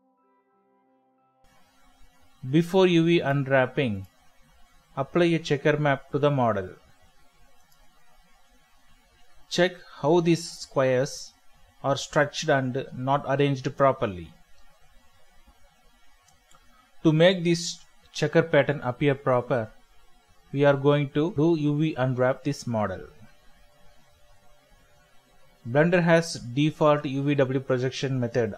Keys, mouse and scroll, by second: 0.3 typing, 0.4 Return, 4.7-5.4 typing, 15.6 middle click, 17.8 typing, 18.0 Return, 18.6 middle click, 20.1 scroll up 1, 20.5 shift+middle click, 22.7 shift+middle click.